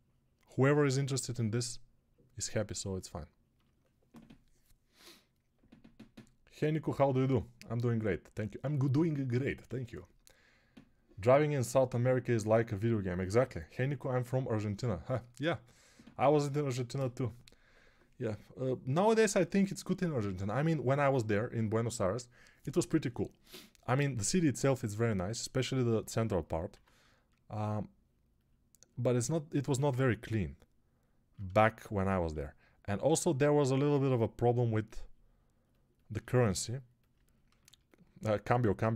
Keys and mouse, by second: 26.6 x, 38.8 x.